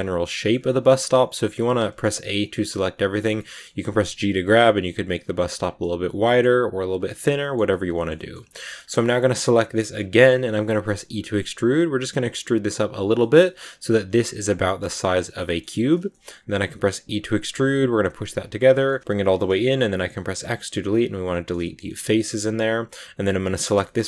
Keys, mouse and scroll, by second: 1.7 a, 1.9 a, 2.2 middle click, 2.7 g, 3.3 middle click, 3.6 g, 4.5 middle click, 4.9 g, 5.7 middle click, 6.4 g, 7.0 middle click, 7.7-8.0 scroll up 2, 7.8 middle click, 8.0 shift+middle click, 8.7-9.2 scroll up 1, 9.7 right click, 10.0 middle click, 10.9 e, 13.1 shift+middle click, 13.5 scroll up 2, 14.9 right click, 15.3 shift+middle click, 15.7 scroll down 2, 16.0 shift+middle click, 16.3-16.8 scroll up 1, 16.8 e, 18.6 shift+middle click, 19.4 x, 21.2-23.3 middle drag, 23.3 right click, 23.7 shift+middle click, 23.9 scroll up 1.